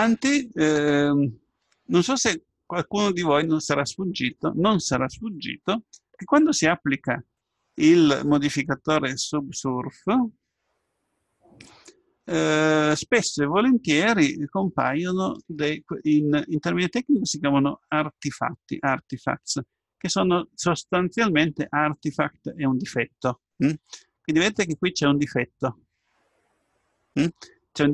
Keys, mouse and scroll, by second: 2.0 Tab, 3.0-4.6 middle drag, 12.4-13.8 scroll up 1, 13.8-14.3 scroll up 1, 14.3-15.9 middle drag, 17.0-19.0 middle drag, 20.4-22.4 middle drag, 24.1-26.1 middle drag.